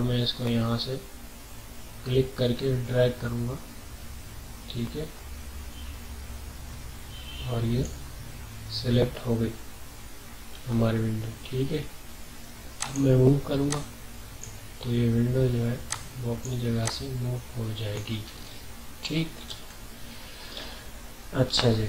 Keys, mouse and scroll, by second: 10.0 typing, 12.8-19.5 drag, 19.5 ctrl+z.